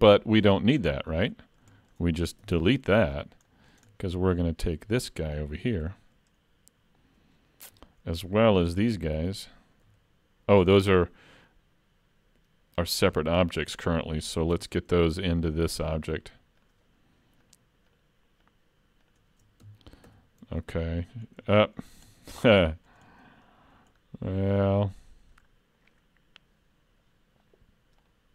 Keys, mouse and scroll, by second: 0.2-0.5 scroll down 3, 0.5 shift+middle click, 0.9-1.4 scroll up 1, 1.4 middle click, 1.8 shift+scroll up 1, 2.0 shift+middle click, 2.4 x, 3.5 middle click, 3.9 shift+middle click, 5.9 l, 7.3-8.9 scroll up 3, 8.9 l, 9.9 l, 11.3-12.2 scroll down 2, 12.2-12.9 scroll down 1, 12.9 scroll up 2, 13.1 alt+a, 14.0 shift+middle click, 14.6 Tab, 15.4 click, 16.1 shift+click, 20.1 ctrl+j, 21.3 scroll up 3, 21.6 shift+middle click, 22.6 middle click, 22.7 shift+middle click, 23.1 middle click, 24.0-24.3 scroll down 2, 24.6 middle click, 28.0 click.